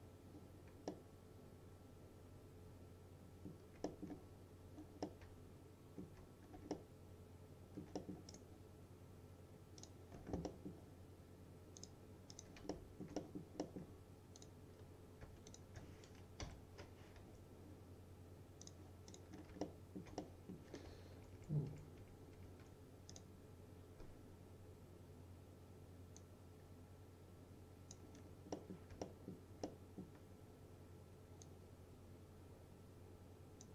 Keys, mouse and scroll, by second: 1.0-3.8 alt+middle drag, 4.4-5.1 scroll up 1, 5.1-6.5 middle drag, 6.5 scroll down 1, 6.8-8.0 alt+middle click, 8.4 right click, 9.9 click, 10.5 middle click, 11.8 click, 12.8-13.5 alt+middle click, 14.4 click, 15.0-15.3 scroll up 1, 15.6 shift+click, 16.5 Delete, 17.3 2, 18.7 click, 19.4 scroll down 1, 19.7-20.6 alt+middle click, 21.2 ctrl+z, 23.2 click, 26.2-28.1 drag, 28.2-28.6 scroll down 1, 28.6 middle click, 29.1-30.3 alt+middle drag, 31.5-33.7 drag.